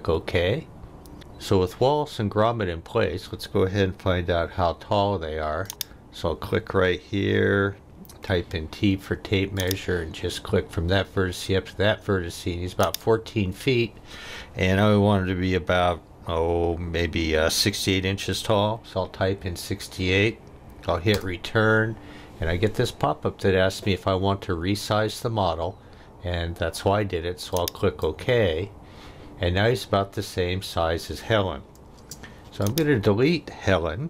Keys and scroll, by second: 8.1 t, 18.3 6, 18.7 8, 21.1 Return, 32.0 space.